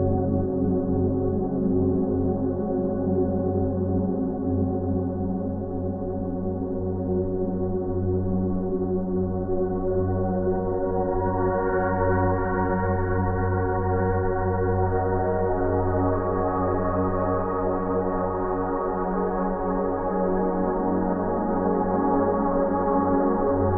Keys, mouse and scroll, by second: 3.3 ctrl+space, 4.4 scroll up 1, 4.9 p, 7.0 click, 12.2 ctrl+alt+z, 13.4 click, 20.8 click.